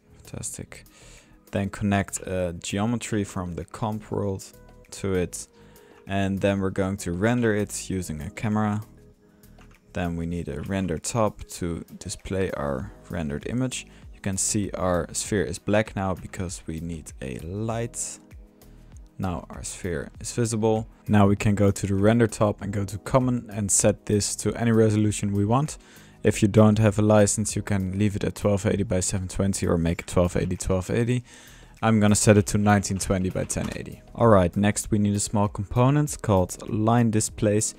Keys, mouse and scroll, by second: 0.0-0.3 typing, 0.5-1.0 drag, 1.7-2.2 drag, 2.4 drag, 2.8-3.5 typing, 3.1 drag, 4.1-4.7 drag, 4.8 drag, 5.4-6.6 drag, 7.0-7.4 drag, 7.2-7.9 typing, 8.2 click, 9.1 drag, 9.6 Tab, 9.6-10.3 drag, 10.3-11.1 typing, 10.5-11.4 drag, 11.7-12.1 drag, 12.5 drag, 13.3 click, 13.7 drag, 14.0-16.0 middle drag, 16.0-16.3 drag, 16.1 Tab, 16.8 drag, 17.6 click, 18.6 drag, 19.0-20.0 middle drag, 20.2-20.7 middle drag, 20.7 click, 21.3 ctrl+click, 23.0-23.3 drag, 25.7-26.9 drag, 29.2 drag, 37.2 click.